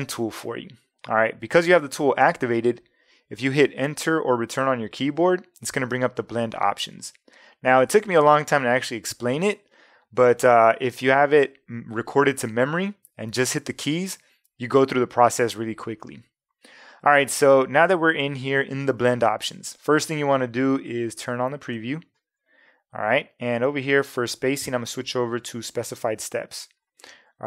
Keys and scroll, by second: 3.9 Return.